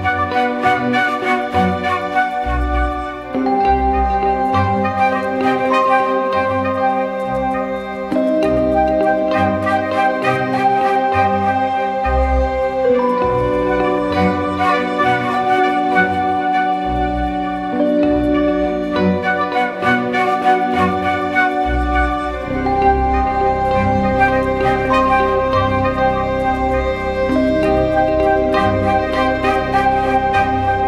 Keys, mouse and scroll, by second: 1.6 ctrl+-, 1.9 ctrl+-, 3.2 ctrl+-, 4.0 ctrl+-, 4.2 alt+shift+click, 6.9 Return, 7.6 ctrl+=, 9.0 ctrl+=, 9.7 ctrl+=, 11.8-12.3 ctrl+scroll down 1, 12.5-12.9 alt+scroll down 1, 13.9 space, 16.8 double click, 22.1 ctrl+t, 27.0 ctrl+h, 30.5 double click.